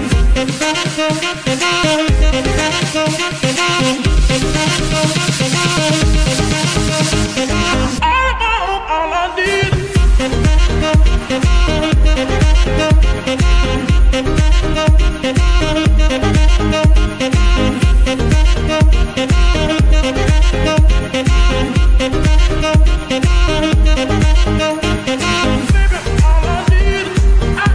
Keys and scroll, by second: 0.3 ctrl+Tab, 1.4 g, 2.0 Escape, 5.2 ctrl+Tab, 6.6 g, 9.0 Escape, 10.7 g, 10.8 y, 13.9 Escape.